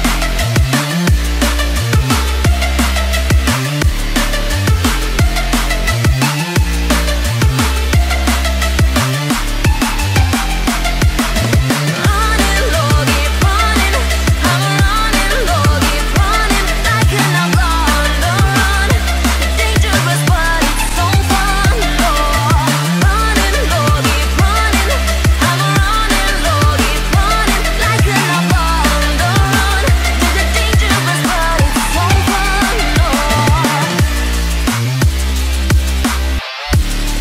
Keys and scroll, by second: 7.6 ctrl+0, 13.0 ctrl+g, 14.4 ctrl+alt+shift+e.